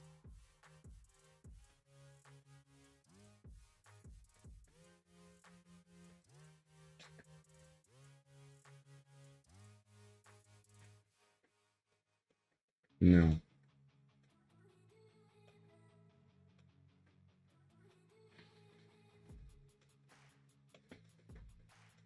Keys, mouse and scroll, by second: 1.3 scroll down 1, 1.4 scroll up 1, 1.7-3.4 middle drag, 3.4-4.0 scroll down 2, 4.0-4.3 scroll up 2, 4.3-5.1 middle drag, 5.1 click, 6.2 click, 7.0-9.7 middle drag, 9.7 scroll down 1, 10.0-10.7 shift+middle drag, 10.7-11.2 scroll up 5, 11.2-11.6 shift+middle drag, 11.6 scroll down 2, 11.9-13.1 shift+middle drag, 13.1 scroll up 2, 13.3-13.8 shift+middle drag, 13.8-14.2 scroll down 1, 14.2-21.6 shift+middle drag, 21.6-21.9 scroll up 2, 21.9-22.0 shift+middle drag.